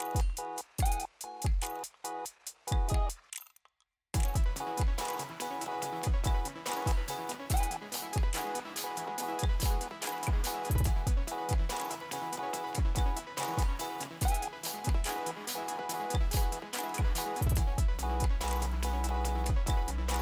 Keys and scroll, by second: 0.3 space, 2.0 super+v, 2.8 super+v, 4.0 super+a, 4.6 p, 5.4 super+c, 6.2 super+v, 8.7 p, 13.0 F9, 16.1 alt+super+v, 16.7-18.5 typing, 19.8 super+a.